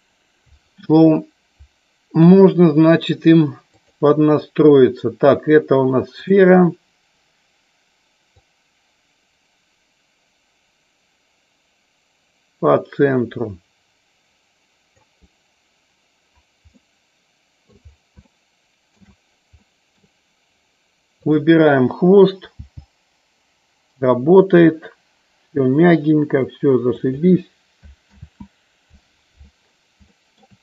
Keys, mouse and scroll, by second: 2.3 KP_1, 6.3 click, 8.3-15.0 drag, 17.0 middle click, 18.3 shift+middle click, 19.8 middle click, 22.7 g, 27.1 click, 28.4 ctrl+z, 30.2 shift+middle click.